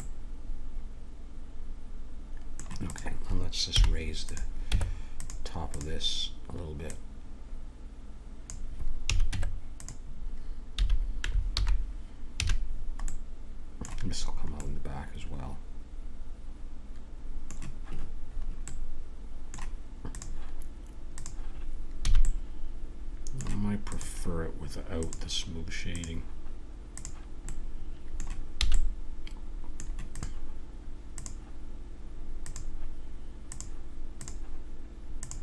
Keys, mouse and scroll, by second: 0.0-1.2 middle drag, 2.9-5.2 drag, 3.7 h, 4.7 Tab, 9.0 a, 9.3 Tab, 10.8 a, 11.5 alt+h, 12.3 a, 15.4-16.5 middle drag, 18.3-20.1 middle drag, 20.1-22.4 drag, 22.1 a, 22.4 middle click, 23.8-27.5 drag, 27.5-28.8 middle drag, 28.6 a, 30.1-31.2 right drag, 31.2 click.